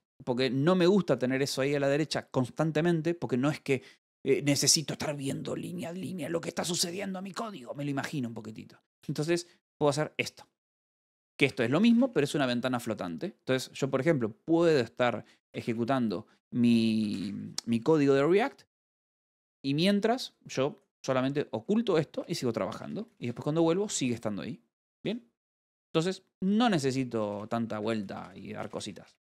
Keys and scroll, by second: 0.0-1.4 typing, 3.3 i, 3.7 Return, 9.9-12.3 typing, 13.8-14.6 typing, 16.0-16.9 typing, 19.2-20.6 typing, 21.4 Escape, 22.6 k, 24.5 j, 28.2 Escape, 28.8-29.2 typing.